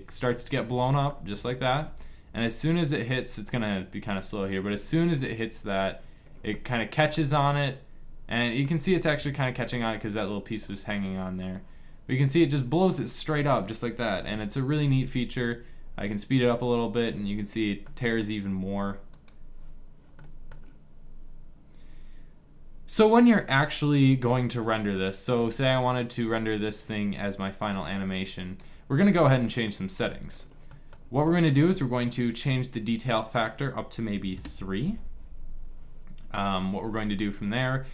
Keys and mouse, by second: 6.0-7.1 middle drag, 8.2 middle click, 11.8 middle click, 13.5-15.3 drag, 16.9 middle click, 17.6-18.7 drag, 18.9-20.7 drag, 24.7-26.9 middle drag, 27.4-28.7 drag, 29.1-30.5 middle drag, 33.0-35.7 drag.